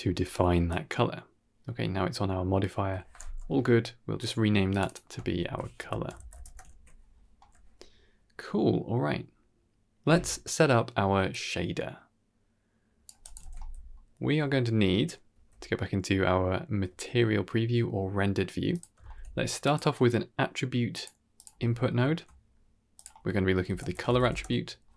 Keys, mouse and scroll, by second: 0.2-1.1 drag, 3.1 n, 4.1 click, 4.6 click, 4.7-6.3 drag, 6.6 ctrl+s, 7.3 n, 9.6-10.1 middle drag, 11.2-13.0 drag, 13.1 click, 13.3 ctrl+s, 13.8 middle click, 14.4 middle click, 15.2 z, 16.7 z, 17.9-18.5 middle drag, 18.6 click, 18.9 shift+a, 21.6 ctrl+middle click, 22.2 middle click, 22.8-24.2 drag.